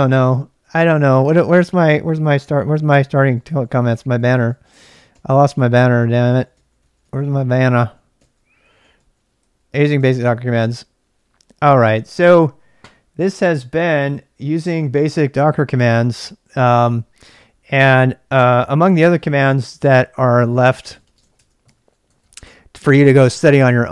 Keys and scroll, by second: 0.6 ctrl+a, 0.9 ctrl+a, 1.0-9.9 typing, 19.8 ctrl+c, 20.6-23.9 typing, 22.1 ctrl+[.